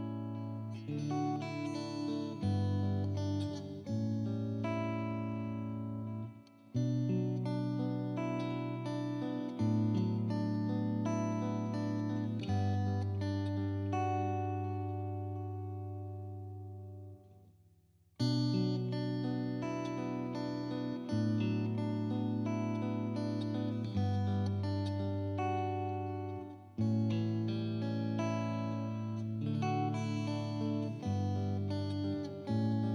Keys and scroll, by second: 0.0-1.2 typing, 2.5 Caps_Lock, 2.6 e, 3.0 y, 6.0 ctrl+t, 7.1 Return, 9.9-13.3 typing, 14.8 ctrl+t, 17.0 Return, 17.7 ctrl+t, 18.4 Return, 19.3 BackSpace, 20.6-25.0 typing.